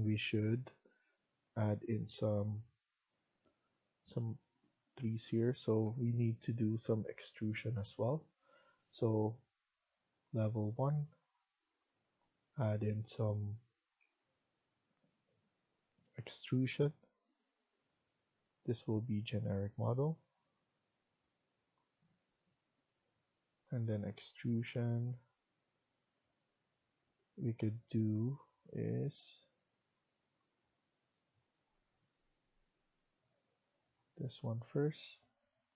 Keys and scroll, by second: 35.1 Escape.